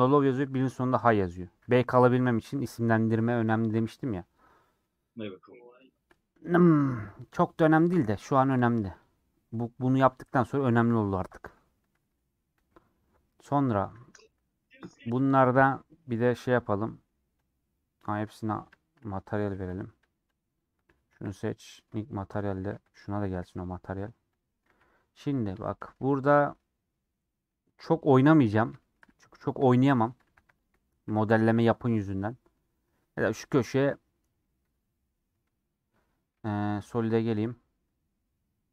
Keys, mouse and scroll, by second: 4.0-4.6 scroll down 5, 4.6 middle click, 5.3 click, 5.7 scroll up 2, 5.9 shift+middle click, 6.2 scroll down 1, 6.5-6.9 scroll up 2, 6.6 middle click, 7.2-8.5 middle drag, 8.5-13.0 drag, 13.0 middle click, 13.9 a, 16.1-20.3 middle drag, 20.3 click, 20.6 click, 23.8 middle click, 24.3 click, 24.4 middle click, 24.6 z, 25.1-26.8 middle drag, 26.8-27.3 scroll up 2, 27.3 scroll down 1, 27.5-28.5 middle drag, 28.5 click, 28.8 shift+middle click, 29.0 scroll down 1, 29.0-29.3 scroll up 2, 29.3 middle click, 29.9 scroll up 1, 30.1 Tab, 30.5 alt+click, 30.9 scroll up 1, 30.9 middle click, 31.4 ctrl+b, 35.3-36.5 middle drag, 36.5 z.